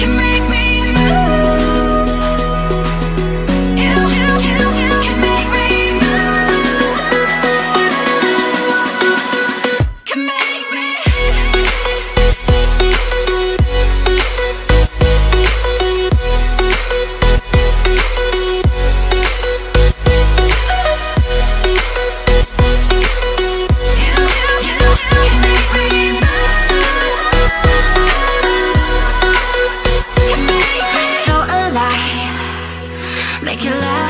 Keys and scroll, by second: 1.3-2.7 typing, 3.8-7.8 typing, 13.5 BackSpace, 14.2 space, 14.7 alt+super+space, 14.8 alt+super+space, 15.9 super+space, 30.2 v, 32.9 super+c, 33.3 super+f.